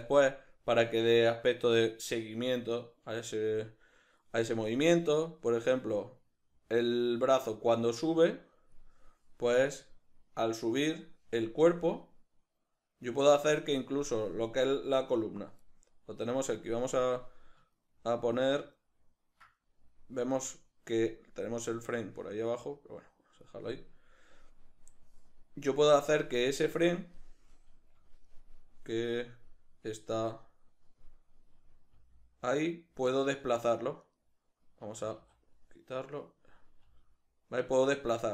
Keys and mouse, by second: 10.7 right click, 11.6-14.6 drag, 14.6 right click, 17.7-30.4 ctrl+middle drag, 30.4 right click, 32.0 g, 34.2 right click, 35.0 a, 36.2 right click, 36.8 g.